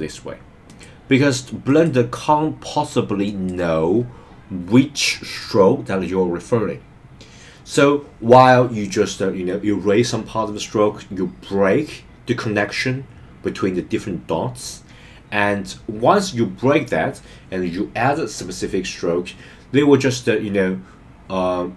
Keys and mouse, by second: 0.7 click, 3.2 click.